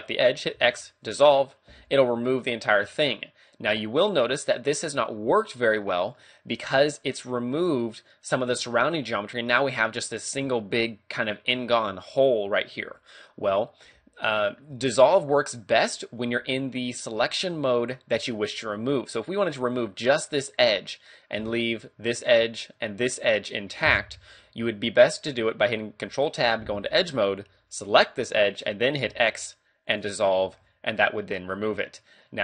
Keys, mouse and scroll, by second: 0.5 x, 2.5 scroll down 1, 2.8 middle click, 6.2 middle click, 12.8 ctrl+z, 13.3-13.9 scroll up 1, 13.9 middle click, 14.8 a, 15.1 middle click, 21.4 d, 21.6 ctrl+click, 22.7 ctrl+click, 26.0 ctrl+Tab, 27.9 right click, 29.1 x, 30.5 ctrl+Tab, 31.7-32.0 scroll down 1, 32.2 middle click.